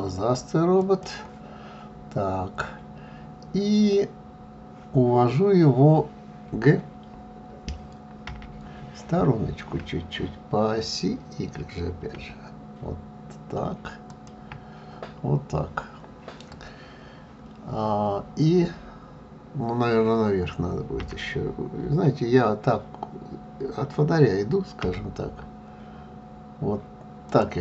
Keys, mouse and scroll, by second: 14.1-14.5 y.